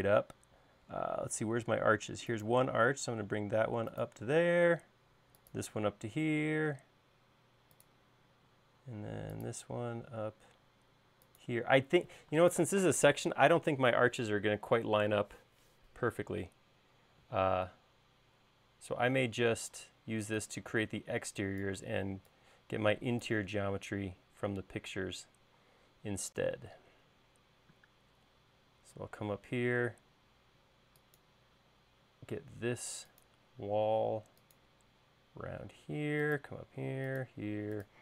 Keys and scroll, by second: 0.8 l, 4.7 l, 8.8 l, 12.7 space, 20.0 e, 26.8 l.